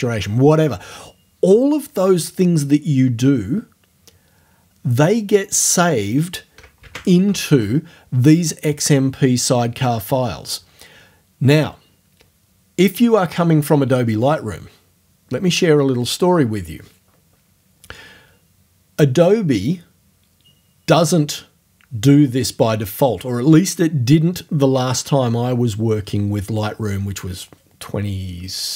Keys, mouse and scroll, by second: 7.2 alt+Tab.